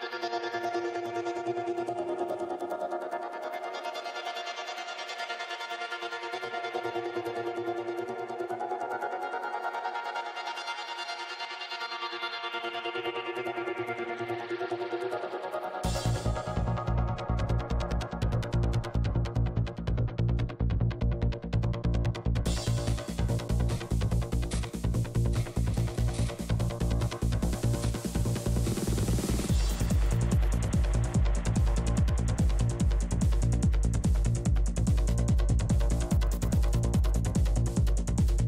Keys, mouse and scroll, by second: 1.0 right click, 1.7 shift+c, 1.8 f, 2.6-3.9 drag, 3.9 f, 4.1-5.2 middle drag, 4.6-7.3 drag, 5.2 middle click, 6.8 middle click, 7.3 i, 7.5 p, 7.7 f, 8.1-9.2 drag, 9.4 i, 9.4 f, 9.8-11.7 drag, 11.4 shift+c, 11.5 f, 12.0-14.4 middle drag, 12.8 f, 14.4 shift+f, 14.8 middle click, 15.2-16.4 drag, 16.4-17.5 middle drag, 17.5 click, 18.4-19.9 middle drag, 21.5 ctrl+z, 22.2 click, 22.9 f, 23.3-24.9 drag, 23.8 f, 24.7-25.9 middle drag, 25.5 f, 25.9-27.5 drag, 27.5 p, 27.5 f, 27.8-29.1 drag, 28.4-31.0 middle drag, 30.6-34.7 typing, 31.1 middle click, 32.1 click, 34.2-37.1 drag, 37.1 p, 37.1 f, 37.5-38.4 drag.